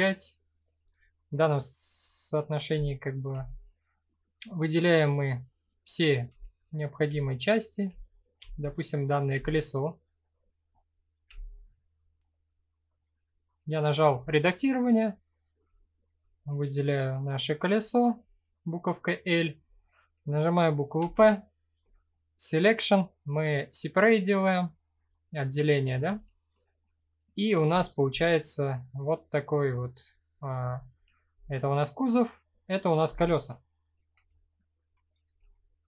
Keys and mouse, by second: 0.4 click, 2.9 l, 4.4 middle click, 5.9-8.9 typing, 9.5 middle click, 10.9 l, 11.6-12.9 middle drag, 16.3 middle click, 20.5 p, 25.3 middle click, 25.6 Tab, 26.7 middle click, 27.3 click, 27.8 click, 28.3-29.3 middle drag, 30.0 middle click, 30.9 h, 34.8 alt+h, 35.5 middle click.